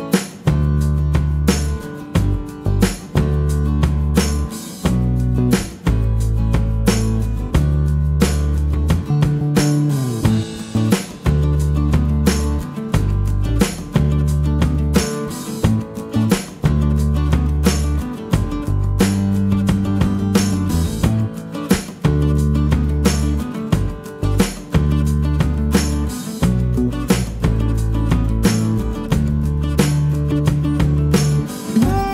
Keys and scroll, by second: 2.2 q, 7.5 x, 8.0 Return, 8.9 space, 13.3 l, 14.3 space, 16.9 l, 17.8 space, 19.0 p, 20.9 5, 21.1 Return, 21.5 space, 22.8-26.0 typing, 23.8 Return, 25.6 Return.